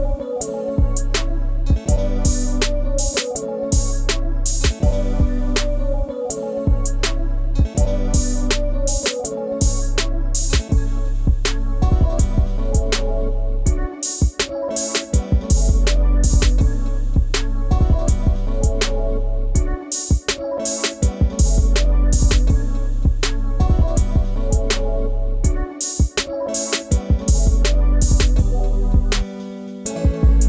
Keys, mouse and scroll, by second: 3.1 Down, 5.3 BackSpace, 5.5 scroll up 1, 6.8 shift+click, 7.9 Down, 9.6 shift+click, 11.3 shift+click, 11.8 shift+click, 12.6 Down, 15.7 Down, 16.9 scroll, 17.0 scroll up 1, 17.1-18.2 scroll down 1, 18.7 Down, 20.6-21.0 scroll up 1, 22.4 ctrl+space, 22.5 ctrl+click, 22.7 ctrl+space, 25.2 right click, 26.2-26.5 scroll, 26.5 scroll down 1, 26.6 ctrl+space, 26.6 ctrl+click, 26.9 ctrl+space, 27.3-27.8 ctrl+scroll down 2, 27.3 ctrl+space, 27.8 ctrl+space, 27.9 ctrl+click, 28.1 ctrl+space, 29.1 ctrl+scroll up 1, 29.2 ctrl+space, 29.6 ctrl+click, 29.6 ctrl+space.